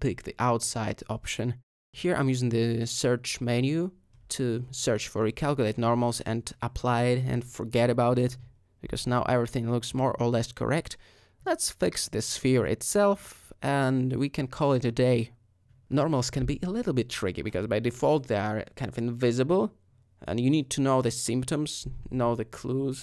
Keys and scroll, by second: 1.0-1.4 typing, 7.7 Tab, 10.3 Tab, 11.1 a, 11.6 space, 13.8 Tab, 15.1 ;.